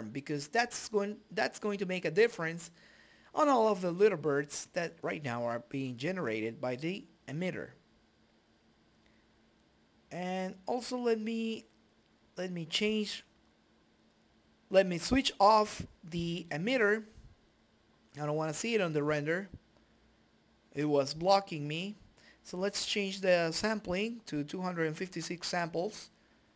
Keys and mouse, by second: 2.7 s, 4.2 right click, 4.4 right click, 5.6-10.3 drag, 11.0 click, 11.2 click, 17.2-20.9 drag, 22.2-23.5 drag, 25.9-26.5 drag.